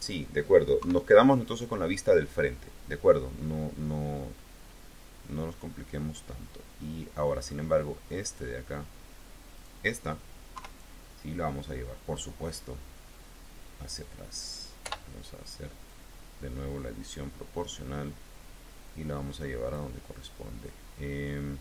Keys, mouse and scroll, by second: 0.6 KP_3, 4.2 click, 5.1-7.5 middle drag, 7.8 middle click, 8.1 click, 9.4 click, 10.4 KP_3, 14.7 o, 15.7-19.8 drag, 20.2 click, 20.5-21.6 middle drag.